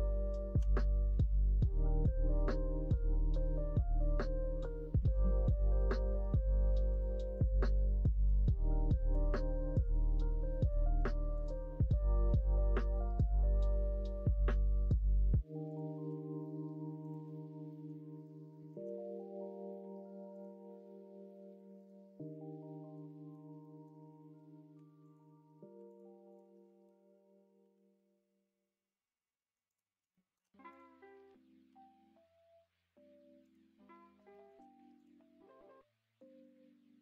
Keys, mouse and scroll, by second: 1.0 e, 5.0 ctrl+z, 5.7 e, 8.1 click, 9.1 f, 10.4 middle click, 10.9 1, 11.3 click, 11.8 g, 15.6 click, 16.0 g, 17.7 middle click, 18.2 middle click, 18.6 middle click, 20.3 click, 21.8 click, 23.0 middle click, 23.5 middle click, 24.7 2, 25.0 click, 25.9 ctrl+click, 26.6 middle click, 27.5 g, 30.1 shift+middle click, 30.7 click, 31.6 g, 34.3 shift+middle click, 34.9 click, 36.2 s.